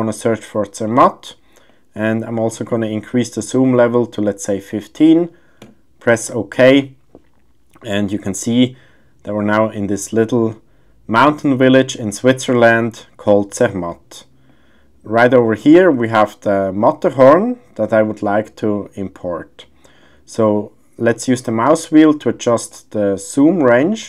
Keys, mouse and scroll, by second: 13.9 click, 18.1 click, 22.7 click.